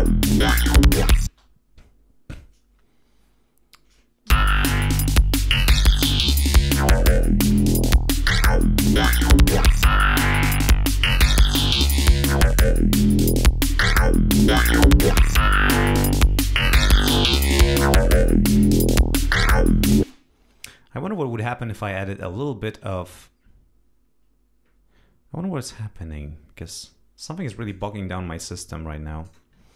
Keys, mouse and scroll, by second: 1.2 space, 4.2 l, 4.9 click, 7.8 click, 9.0-11.5 drag, 11.8-13.1 drag, 13.5-16.8 drag, 17.5 click, 29.6 ctrl+alt+Right.